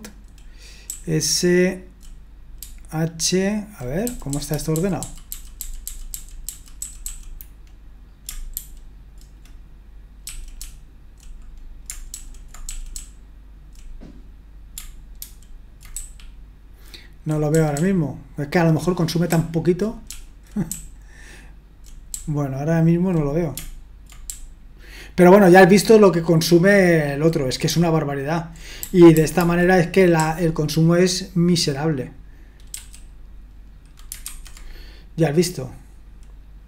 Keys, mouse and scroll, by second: 0.0 Up, 0.8-2.0 Up, 2.6 Down, 3.3 Down, 3.3 Down, 3.4 Down, 3.6 Down, 5.9 Down, 6.1 Down, 6.8 Up, 7.0 Up, 8.6 ctrl+u, 10.6 typing, 12.1-13.6 typing, 15.2 ctrl+u, 15.9-17.2 typing, 18.4-23.1 typing, 24.3-27.1 typing, 32.7 q, 34.2 super+1.